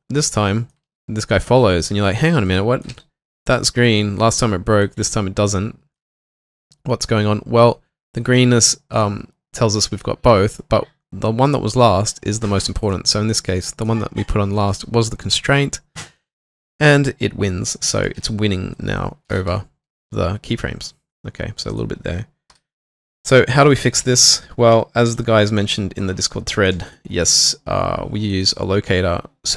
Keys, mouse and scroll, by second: 1.7 double click, 6.2 typing, 18.2-19.8 typing, 22.5 typing, 24.0 typing, 26.7 typing, 27.3 double click.